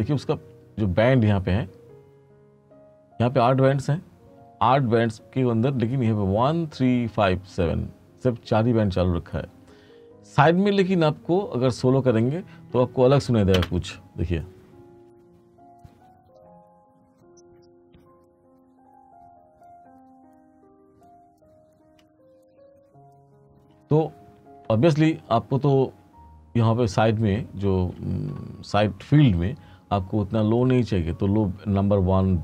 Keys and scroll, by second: 13.7 space, 23.6 space.